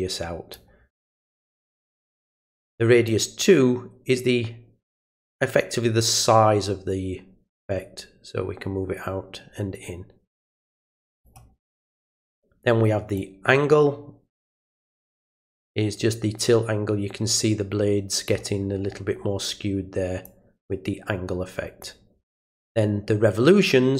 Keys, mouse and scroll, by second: 3.0-11.2 drag, 13.1-18.2 drag, 20.2-21.8 drag.